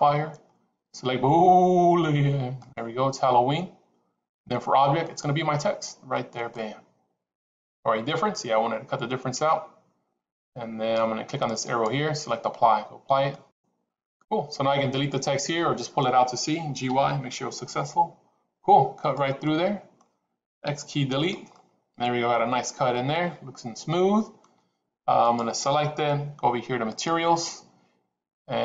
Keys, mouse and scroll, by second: 4.9-6.6 drag, 11.6-13.6 drag, 14.9 click, 16.8 g, 19.4 click, 20.5 x, 21.4-24.4 middle drag, 25.2 click.